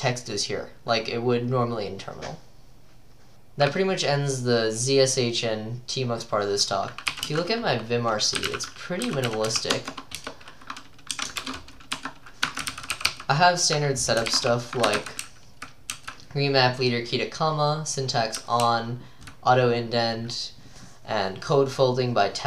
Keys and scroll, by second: 7.1-16.9 typing, 10.2 Return, 18.4-19.9 typing.